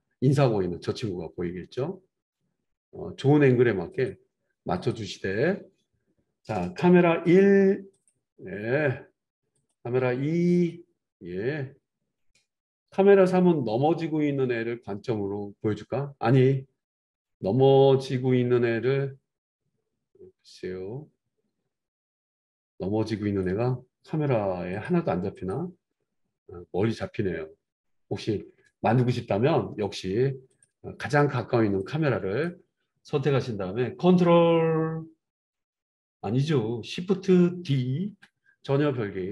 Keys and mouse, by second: 4.7 click, 4.9-7.3 middle drag, 7.3-30.6 drag, 30.6-31.8 middle drag, 31.8-39.3 drag, 38.3 shift+d.